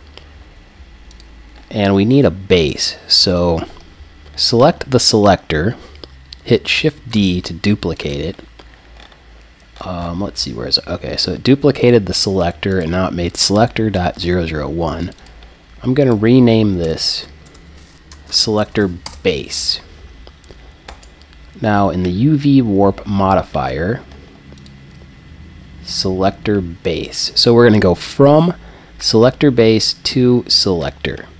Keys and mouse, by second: 2.6-4.6 right drag, 7.1 shift+d, 8.1 click, 11.8-14.5 drag, 15.0-17.0 drag, 17.0 BackSpace, 20.9-23.0 drag, 24.6-26.5 drag.